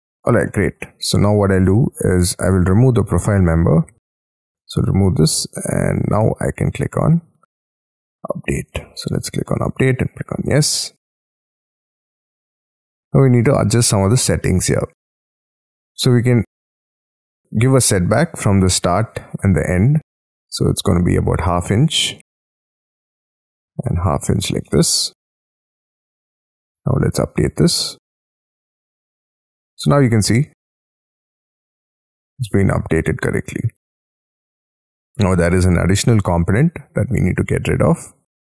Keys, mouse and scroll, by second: 0.1 middle click, 0.4 middle click, 0.8 scroll down 4, 1.2 space, 1.4 Escape, 11.4 scroll up 16, 11.6 middle click, 12.1 scroll down 12, 12.7 double click, 16.8 middle click, 17.7 middle click, 21.0-22.1 typing, 22.6 Tab, 23.2 Tab, 23.4-24.8 typing, 25.5 middle click, 29.4-30.0 scroll up 7, 30.0 middle click, 33.3-34.6 scroll down 4, 34.6 double click, 37.0 middle click, 37.6-38.0 scroll down 6, 38.0-38.4 scroll up 11.